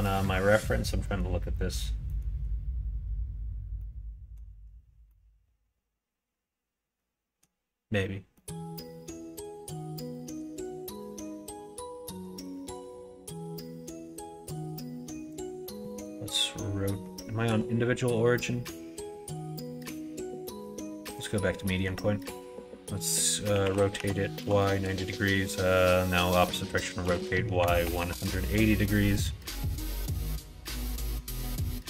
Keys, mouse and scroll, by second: 8.2 middle click, 8.9 middle click, 10.0 middle click, 10.7 shift+d, 12.5 alt+z, 12.8 middle click, 14.2-15.4 drag, 15.4 middle click, 15.8 middle click, 21.5 middle click, 23.4 r, 26.9 r, 29.3 middle click, 30.3-31.3 drag.